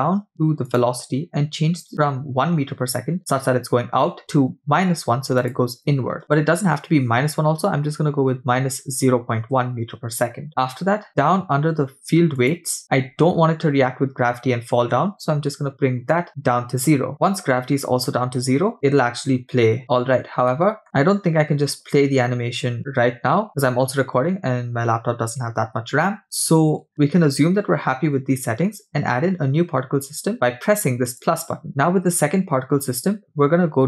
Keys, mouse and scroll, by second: 0.7 click, 5.4-10.5 drag, 10.6-12.4 scroll down 3, 12.4 click, 13.0 scroll down 2, 16.1 click, 19.9-20.5 scroll down 3, 20.5 middle click, 20.8-21.1 scroll down 1, 24.8 scroll down 3, 25.6-26.7 scroll down 5, 26.2-26.9 scroll up 7, 31.1 click.